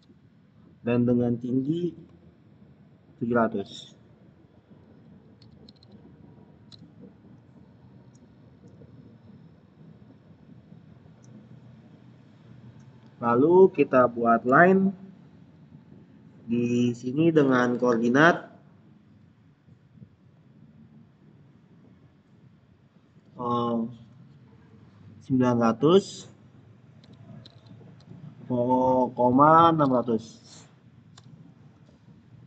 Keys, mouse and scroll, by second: 5.3 Tab, 5.3-6.2 typing, 6.6 Return, 8.1-8.5 scroll down 1, 8.5-10.0 middle drag, 10.0 scroll up 1, 10.6 scroll down 1, 11.1-14.3 middle drag, 14.4 click, 26.9 click, 27.1-29.8 typing, 31.0 Return.